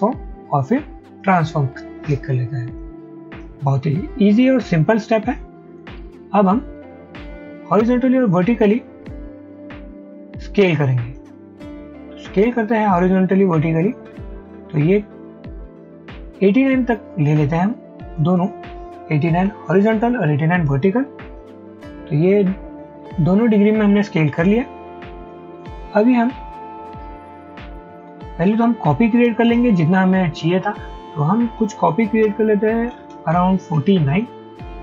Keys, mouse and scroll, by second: 12.3-14.5 scroll down 1, 19.0-19.9 typing, 30.9-34.8 scroll up 1.